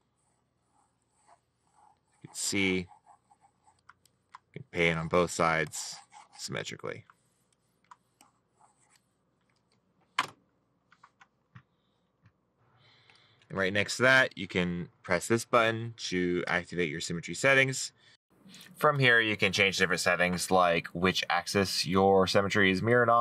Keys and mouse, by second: 0.7 right click, 5.6 middle click, 9.1 middle click, 22.5 middle click.